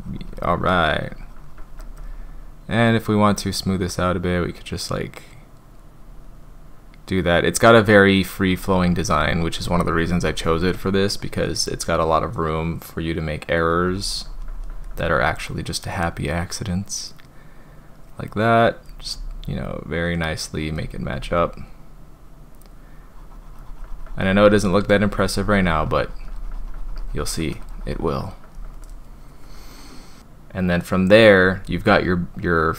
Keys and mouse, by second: 2.8-3.3 drag, 3.7-10.6 drag, 11.6-14.8 drag, 16.0-18.8 drag, 19.1-20.7 drag, 21.1-28.5 drag, 30.2-31.4 drag, 32.6-32.7 drag.